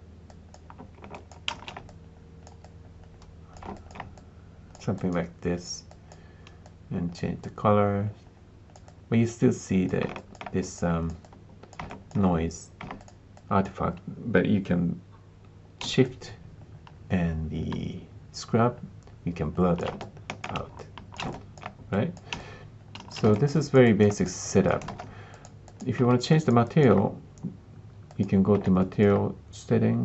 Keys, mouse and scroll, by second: 1.1 alt+click, 1.5 alt+shift+z, 3.7 alt+click, 4.1 click, 4.9-7.3 drag, 8.8 click, 10.1 alt+click, 10.7-12.0 drag, 12.9 click, 19.9 alt+click, 20.7 shift+click, 21.2 alt+click, 23.3 alt+click, 23.5 alt+click, 23.8 alt+click, 24.0 alt+click, 24.4 alt+click, 24.8 ctrl+space, 25.3 click, 25.6 click, 26.3 alt+click, 26.6 alt+click, 28.7 alt+click.